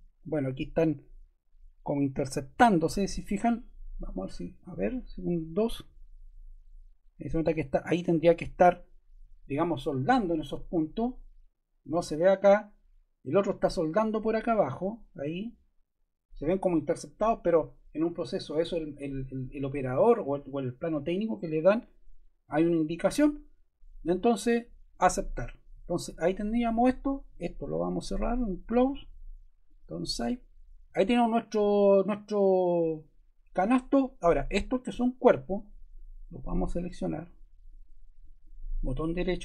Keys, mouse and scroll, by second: 5.5 2, 37.6 shift+click, 38.3 click.